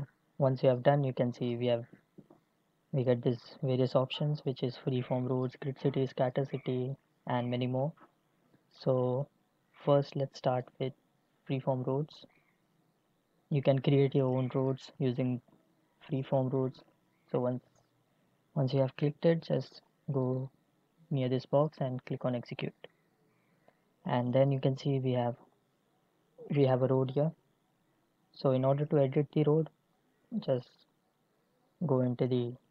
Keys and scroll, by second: 19.6 Delete.